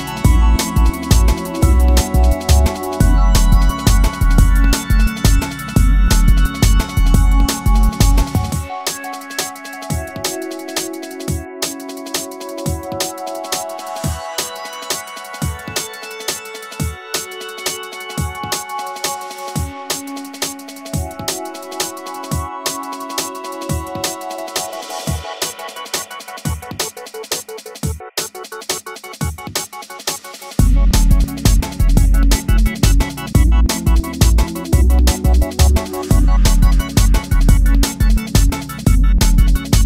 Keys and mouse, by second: 2.3 s, 2.7 click, 3.2 Delete, 3.9 shift+a, 6.3 s, 6.7 click, 6.9 s, 7.8 click, 8.7 g, 10.7 click, 12.5 click, 16.8 click, 18.2 click, 18.5 g, 19.7 click, 20.5-22.2 shift+drag, 22.6 click, 22.9 g, 25.2 click, 25.9 g, 28.7 click, 29.5 shift+click, 30.7 g, 33.9 click, 34.3 g, 34.7 click, 35.8 click, 36.1 shift+click, 39.1 alt+click.